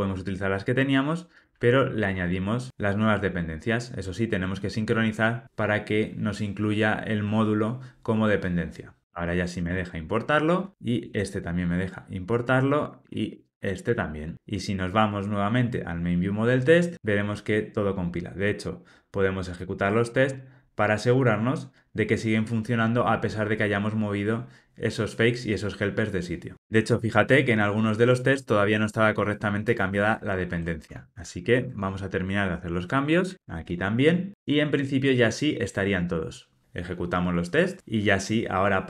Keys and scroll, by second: 2.0 alt+Return, 9.0 alt+Return, 21.1 ctrl+shift+r, 30.8 super+BackSpace, 33.0 alt+Return, 36.0 ctrl+r.